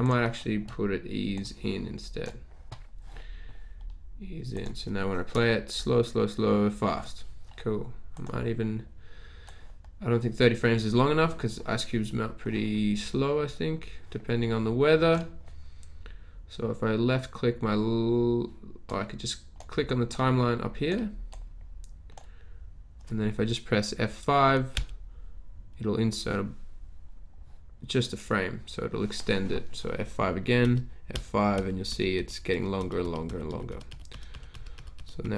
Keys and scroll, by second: 5.4 Return, 24.7 F5, 30.8 F5, 31.2 F5, 31.9 F5, 32.5 F5, 33.3 F5, 33.5 F5, 34.1 F5, 34.7 F5, 35.2-35.3 typing.